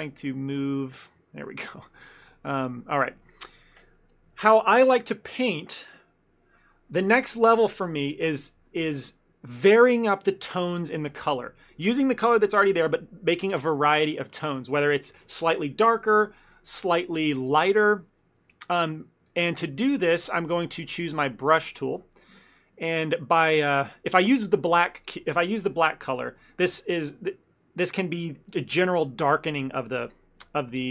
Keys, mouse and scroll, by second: 0.6 click, 2.0 ctrl+z, 3.3 ctrl+middle click, 3.7 middle click, 19.0 right click, 20.3 ctrl+middle click, 21.3 click, 21.9 ctrl+middle click, 22.3 f.